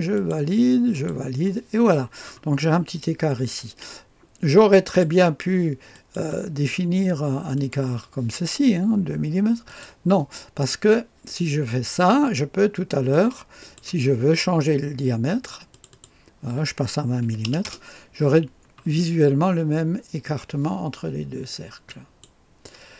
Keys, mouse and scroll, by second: 0.2-1.5 drag, 0.2 middle click, 0.9 middle click, 2.5-4.8 scroll up 1, 4.8 click, 4.8 middle click, 5.9 click, 5.9 middle click, 7.6 click, 9.6 click, 13.1-14.4 drag, 15.7 click, 17.2 KP_2, 17.4 KP_0, 17.6 Return, 18.7-21.3 scroll down 1, 21.8 click.